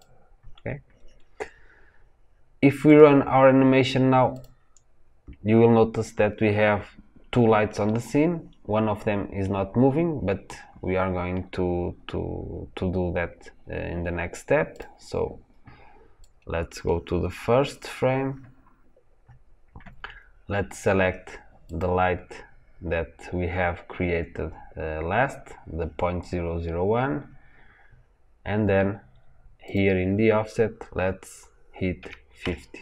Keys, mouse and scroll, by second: 2.8 click, 4.3 click, 14.6 click, 16.1-21.7 drag.